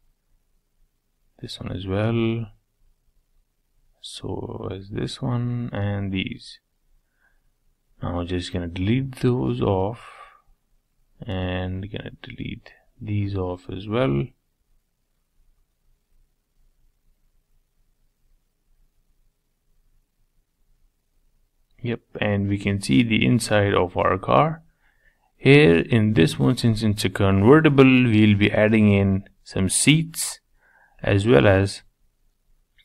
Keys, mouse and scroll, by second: 0.5-2.3 middle drag, 2.3 shift+click, 2.6-3.8 middle drag, 3.8 shift+click, 4.5 shift+click, 4.8-6.0 middle drag, 6.0 shift+click, 6.9 middle click, 7.2-7.7 scroll down 1, 7.7-9.1 middle drag, 9.1 x, 9.5-10.9 middle drag, 10.9 click, 12.0 shift+click, 12.8 shift+click, 13.2 shift+click, 13.8 shift+click, 14.5 shift+click, 15.2 shift+click, 16.6 shift+click, 17.5 x, 17.8-19.2 middle drag, 19.2 click, 20.0 x, 21.0 scroll down 1, 21.3 middle click, 21.8-22.5 scroll up 6, 22.5-24.0 shift+middle drag, 24.0 scroll down 3, 24.3 middle click, 24.8-25.5 scroll down 1, 25.5-27.3 middle drag, 27.3 Tab, 28.1-31.2 shift+middle drag, 31.2-31.7 scroll up 3, 31.7-32.8 shift+middle drag.